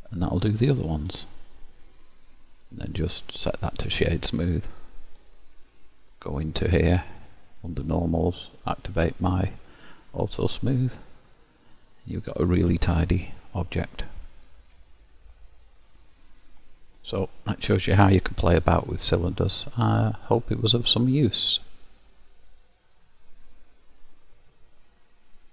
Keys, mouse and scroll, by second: 0.5 middle click, 3.5 right click, 4.3 middle click, 6.3 click, 7.9 click, 8.9 click, 10.9 middle click, 15.0-15.4 scroll up 1, 15.4-15.9 scroll down 4, 15.6-15.9 scroll up 1, 15.9 middle click, 17.9-18.5 scroll up 3, 18.9-21.1 scroll down 1.